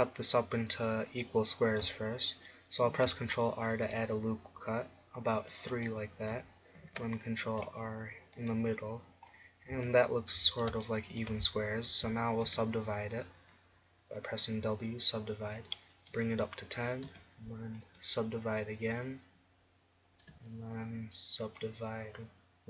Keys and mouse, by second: 2.9 ctrl+r, 5.9-7.9 drag, 6.8 ctrl+r, 8.5-10.8 drag, 9.7 a, 10.4 a, 12.5 w, 17.1 w, 20.4 w.